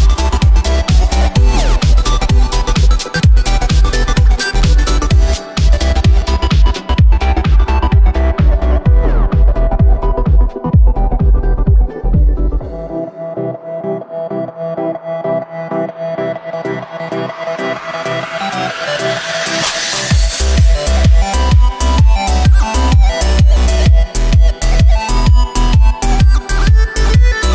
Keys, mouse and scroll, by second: 2.3 Tab, 2.8 right click, 3.0-5.0 middle drag, 5.0 right click, 8.0 ctrl+KP_1, 8.7 right click, 9.8-11.7 drag, 11.7 g, 13.3 Tab, 14.4 click, 14.8 right click, 15.1-17.3 middle drag, 17.3 click, 17.6 shift+a, 18.9 s, 20.5 Tab, 20.9 w, 23.1 shift+r, 24.8-27.5 middle drag.